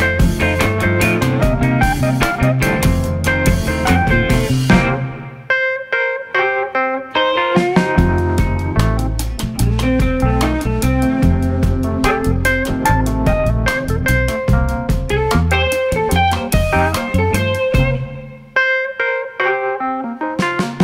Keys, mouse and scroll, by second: 0.5 click, 1.0 middle click, 1.3 Tab, 1.6-2.9 middle drag, 2.9 s, 4.9 middle click, 5.3 Tab, 5.9 Tab, 7.1 ctrl+s, 9.4 click, 10.9 middle click, 11.6 shift+s, 13.7 click, 19.3 ctrl+2, 19.8-20.8 middle drag.